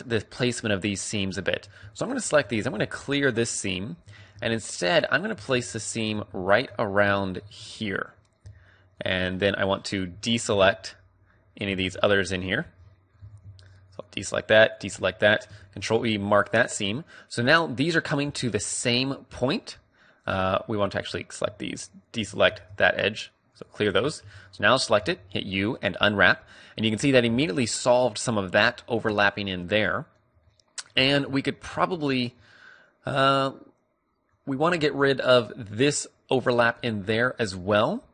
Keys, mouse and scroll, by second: 1.5 a, 1.8-3.6 right drag, 2.5 ctrl+e, 4.0 a, 4.4 right click, 4.7-5.7 drag, 4.8 right click, 5.7 right click, 6.3-10.6 middle drag, 10.0 z, 10.4 b, 10.6 right click, 10.8 middle click, 11.6 b, 12.7-14.6 middle drag, 13.1 z, 14.6 right click, 14.9-16.4 middle drag, 15.5 ctrl+e, 16.8 a, 18.1 middle click, 18.2 click, 18.5-23.7 middle drag, 22.4 ctrl+e, 24.0 a, 24.2 a, 24.9 u, 28.5-33.9 middle drag, 36.0 middle click, 36.7-38.1 middle drag.